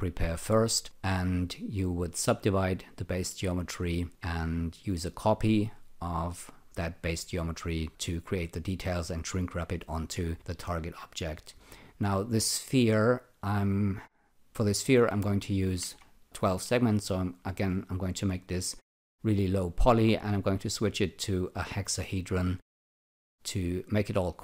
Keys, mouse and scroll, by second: 15.0 click, 15.5-16.3 typing, 16.7 click, 17.5 alt+click, 22.1 click, 22.9 alt+click.